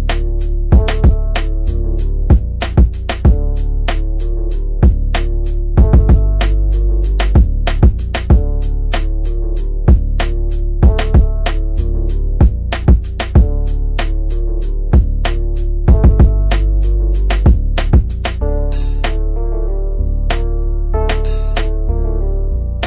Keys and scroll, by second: 8.0 Delete, 14.3 Delete, 18.7 shift+F2, 19.1 Escape, 22.7 F3.